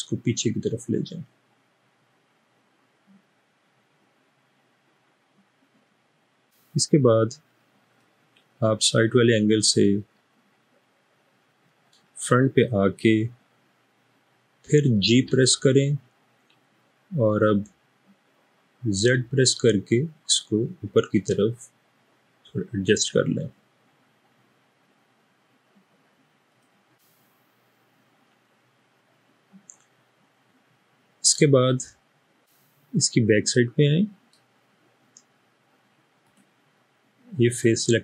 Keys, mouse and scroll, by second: 15.2 typing, 19.0 typing, 27.5-30.5 middle drag, 31.1-32.4 middle drag.